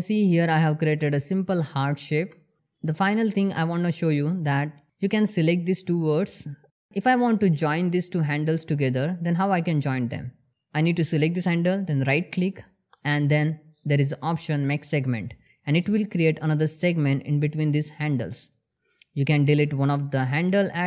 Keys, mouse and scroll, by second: 3.2 ctrl+click, 4.4-4.9 shift+middle click, 4.9 scroll up 1, 5.4 shift+middle click, 5.5 shift+scroll up 2, 5.8 click, 7.3 click, 8.1 scroll down 1, 8.5-9.2 shift+middle click, 9.9 click, 12.8 right click, 16.0 click, 17.2 shift+middle click, 17.6 shift+scroll up 2, 18.0 click.